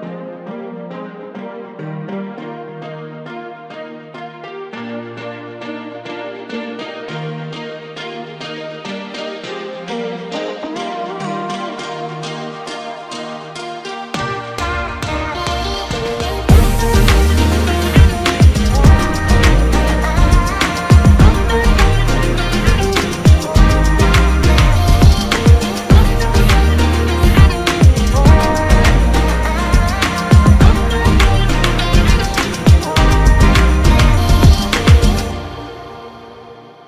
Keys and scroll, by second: 2.7 ctrl+KP_Subtract, 3.1 ctrl+space, 7.9 ctrl+KP_Subtract, 8.5 ctrl+space, 12.4 alt+shift+space, 32.5 alt+space.